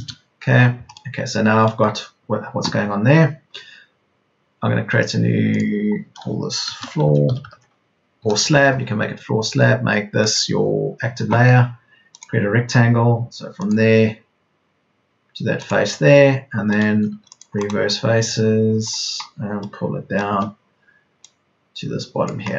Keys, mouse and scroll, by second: 7.5 typing, 8.1 Return, 17.0 space, 17.1 Escape, 21.0 Escape.